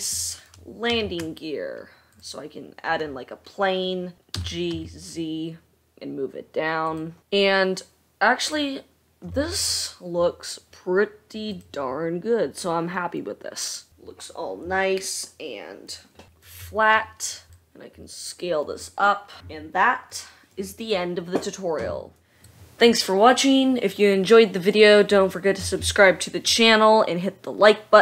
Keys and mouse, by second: 1.4 shift+a, 4.2-4.9 middle drag, 4.9 g, 8.9-16.7 middle drag, 16.7 click, 17.6 s, 18.1-21.9 middle drag, 22.2 middle click.